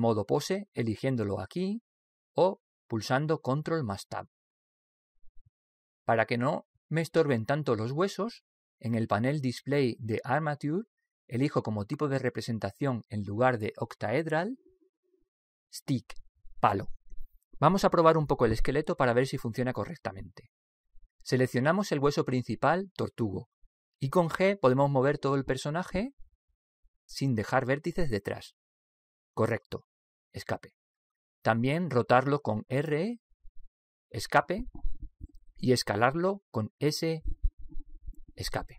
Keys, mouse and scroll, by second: 3.6 ctrl+Tab, 4.7 click, 6.6-16.2 middle drag, 16.2 click, 17.3 middle click, 18.0-21.4 middle drag, 18.1 click, 21.4-22.2 scroll up 1, 22.2-23.4 middle drag, 23.4 right click, 25.3 g, 33.6 r, 37.6 s.